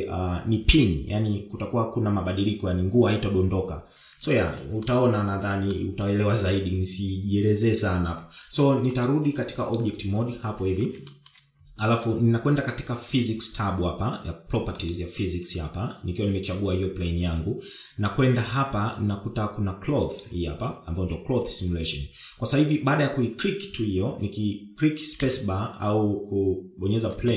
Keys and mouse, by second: 5.1 shift+middle click, 6.3 shift+middle click, 9.4-10.3 drag, 10.3-11.5 middle drag, 11.6 shift+middle click, 15.3 click, 20.6 click, 25.7 space.